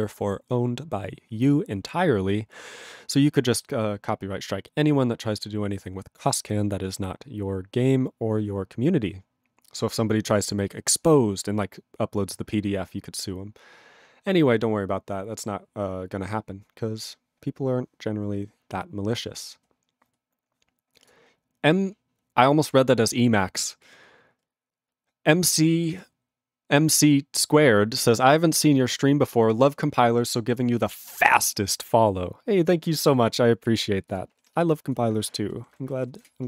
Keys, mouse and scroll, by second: 34.1 click, 34.3 click, 36.3 ctrl+Return.